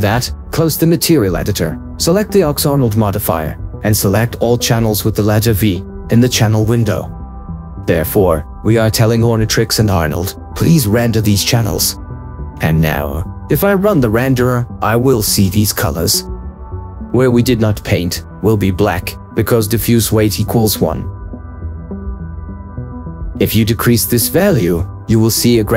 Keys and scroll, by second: 2.2 ctrl+4, 12.5 ctrl+4.